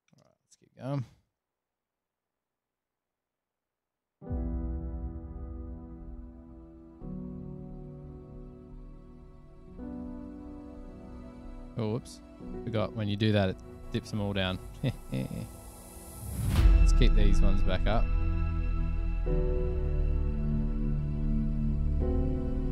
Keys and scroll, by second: 0.1 Return, 0.2 Return, 1.5 super+], 2.6 F7, 6.3 super+[, 6.4 super+[, 7.1 super+=.